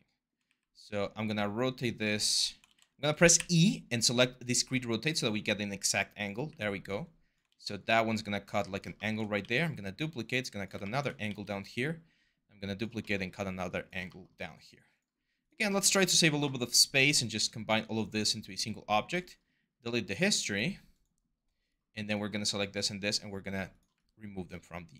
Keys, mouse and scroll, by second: 0.3 e, 2.5 ctrl+z, 3.2-4.3 e, 6.3 w, 7.3 ctrl+z, 9.2 ctrl+d, 11.1 ctrl+d.